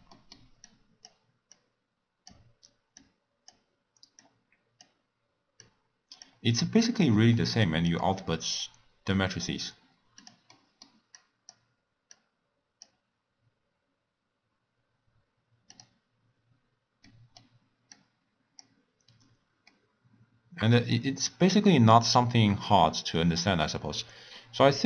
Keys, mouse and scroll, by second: 0.1-0.6 middle drag, 0.6 click, 1.5 click, 2.9 drag, 4.2 drag, 5.6 drag, 6.6-10.2 drag, 10.5-11.3 middle drag, 11.3 click, 12.1 drag, 15.7 click, 16.3-17.0 scroll down 2, 17.0 middle click, 17.9 click, 19.7-22.6 middle drag, 22.6 click, 23.7-24.3 scroll down 2, 24.3-24.8 scroll up 2.